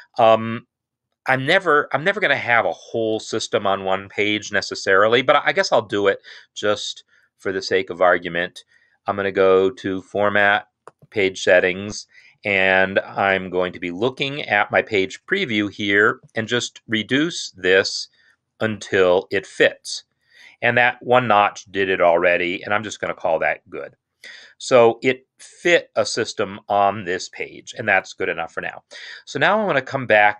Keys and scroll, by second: 17.1 Down.